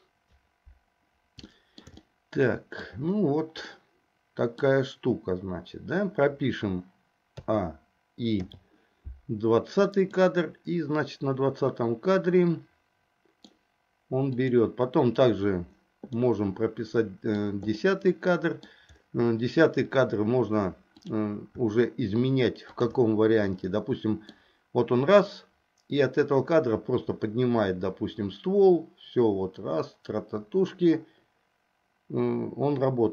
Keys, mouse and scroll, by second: 1.7 shift+middle click, 3.9 middle click, 7.5 a, 8.5 i, 10.2-13.6 middle drag, 14.5 click, 16.3-17.6 middle drag, 17.9 middle click, 21.0 click, 22.7 shift+click, 23.6 middle click, 25.5-33.1 drag.